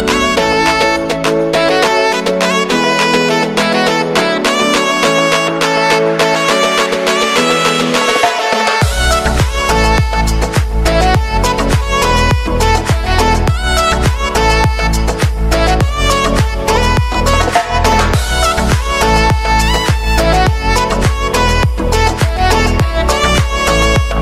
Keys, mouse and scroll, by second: 0.4 space, 1.9 click, 4.4-7.7 drag, 8.1 ctrl+d, 8.6 [, 10.3 click, 11.5 Return, 12.7 click, 15.9 u, 16.3 space, 17.6-20.6 drag, 20.6 t, 21.7 click, 22.1-23.8 typing.